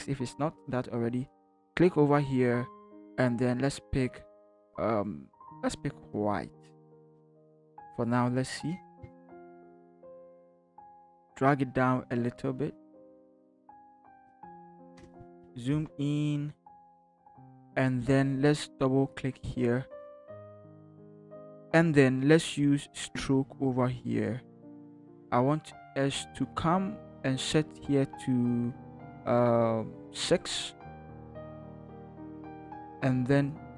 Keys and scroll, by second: 8.7 v, 9.2 ctrl+t, 14.9 shift+Return, 15.4 ctrl+=, 16.1 ctrl+=, 16.6 Up, 31.9 6.